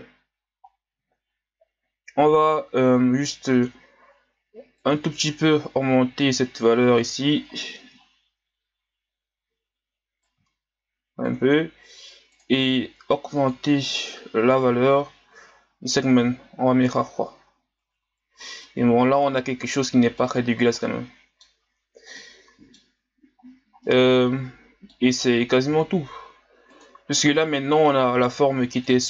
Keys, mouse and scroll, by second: 4.7-7.5 drag, 7.5-8.4 scroll up 7, 10.2-17.6 drag, 17.6-18.0 scroll down 1, 18.0 a, 18.6-20.5 middle drag, 20.5-20.8 scroll down 2, 20.8-21.6 middle drag, 21.6-22.2 scroll up 3, 22.2-23.1 middle drag, 23.1-23.9 scroll down 2, 23.9-26.7 middle drag, 26.7 click, 27.2 scroll down 1, 27.5-29.0 middle drag.